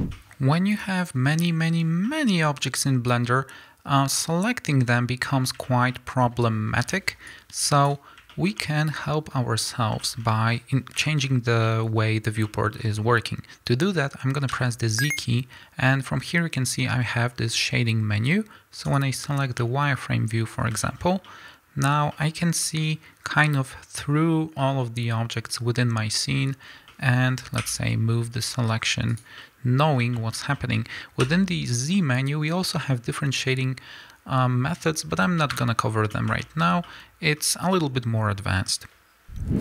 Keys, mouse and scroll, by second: 0.0-1.5 ctrl+middle drag, 1.7-29.2 middle drag, 5.4 scroll down 2, 6.8 b, 9.8 scroll down 2, 11.3 scroll up 1, 21.2 scroll down 2, 21.9 scroll up 2, 26.7 scroll down 2, 28.3 g, 29.2 click, 29.4-39.6 middle drag, 36.7 scroll up 2.